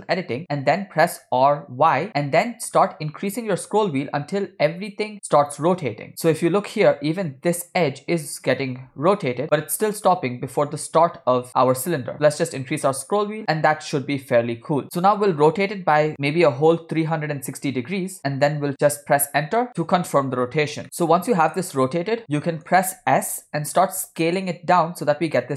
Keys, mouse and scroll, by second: 1.5 r, 20.8-21.3 scroll up 2, 22.4 middle click, 22.4 scroll down 2, 23.6 s.